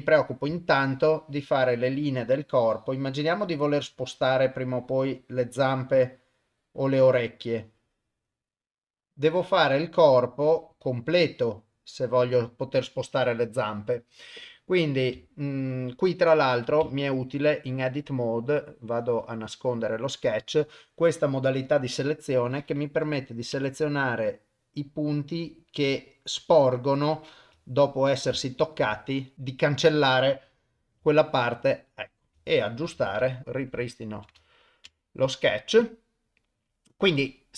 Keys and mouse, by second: 0.6-12.3 shift+drag, 21.3 click, 22.7 click, 23.5 Delete, 25.1 click, 25.9 Delete, 27.7 ctrl+middle click, 28.4 shift+middle click, 29.1 ctrl+middle click, 29.3 ctrl+z, 29.3 Delete, 29.3 click, 29.7 click, 31.0 g, 32.6 ctrl+middle click, 33.0 Tab, 33.3 ctrl+middle click, 33.4 click, 33.9 shift+middle click, 34.4 ctrl+middle click, 35.0 shift+middle click.